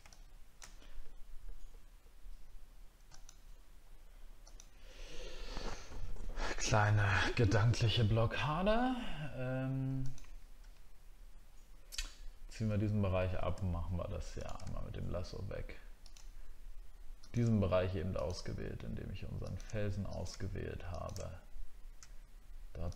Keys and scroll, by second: 7.7 alt+scroll up 1, 12.7 alt+scroll up 1.